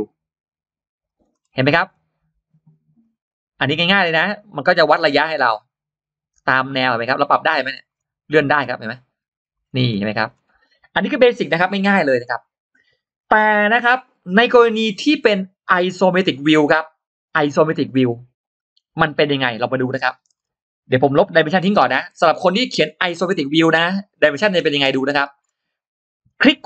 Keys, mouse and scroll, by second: 0.9 click, 1.2-1.5 scroll down 2, 1.7 scroll up 2, 2.8 click, 4.5 click, 7.7 scroll up 2, 9.4 click, 9.7-10.4 scroll down 2, 10.6-10.9 scroll up 1, 20.2-20.5 scroll down 1, 21.0-21.3 scroll up 1, 21.3 e, 21.7 click, 21.7 space, 23.1 click, 23.7 click, 24.4 scroll down 2, 24.4 e, 24.7 space, 25.0-25.6 scroll up 2, 26.1-26.6 right drag.